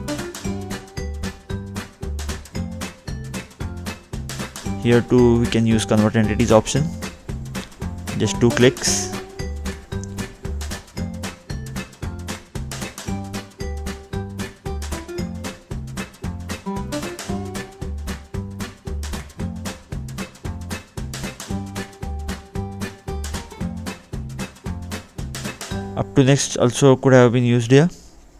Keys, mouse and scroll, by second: 0.2 scroll up 2, 1.0 middle click, 2.1-2.6 scroll down 2, 2.8 scroll up 2, 3.0 scroll down 1, 3.3 scroll up 1, 3.5 middle click, 3.9 scroll down 2, 4.4-4.9 scroll down 3, 4.6 middle click, 6.7 click, 7.2 scroll up 2, 7.9 scroll down 2, 9.5 click, 11.0 click, 12.7 scroll up 2, 14.0 click, 14.2 scroll down 2, 16.9 click, 18.5 scroll up 2, 19.1 scroll up 1, 20.0 middle click, 22.2 middle click, 22.5 click, 23.8 click.